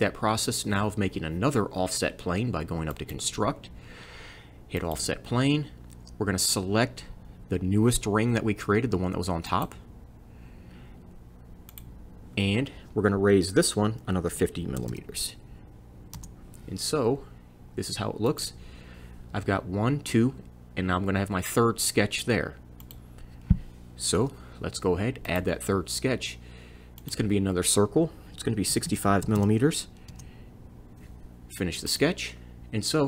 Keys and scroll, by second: 14.0 5, 14.3 o, 14.8 m, 16.2 Return, 24.2 c, 28.5-29.8 typing, 30.1 Return.